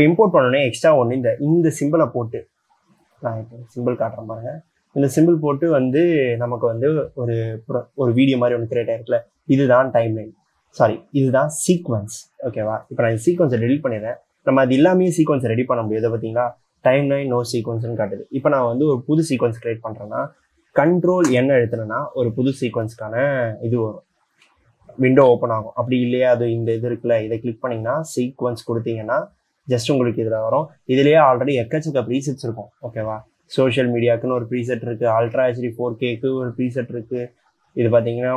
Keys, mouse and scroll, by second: 1.8 ctrl+drag, 13.7 c, 21.6 ctrl+n.